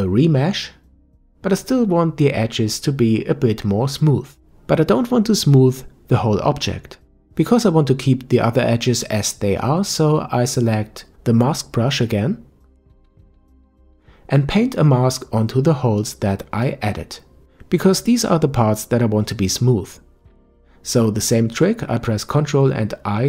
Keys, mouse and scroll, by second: 4.9-6.7 middle drag, 6.7-7.4 scroll down 2, 7.4-10.4 middle drag, 11.0 KP_5, 14.0 click, 15.3-18.2 drag.